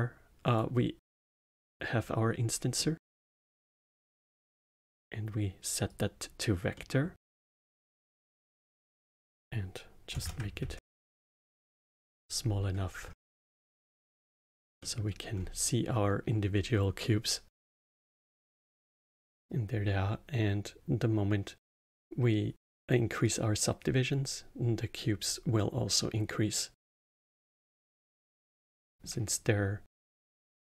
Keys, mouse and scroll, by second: 1.5-2.7 drag, 2.7-4.6 middle drag, 4.6-6.7 drag, 6.7-8.4 middle drag, 8.4-11.6 drag, 12.9-13.6 scroll up 4, 13.6-15.3 middle drag, 15.3-17.9 scroll up 2, 17.9 scroll up 1, 18.0-18.5 middle drag, 18.5-19.1 scroll down 1, 19.1-22.1 middle drag, 23.2-26.3 drag, 27.2-28.2 drag, 28.2-30.7 middle drag.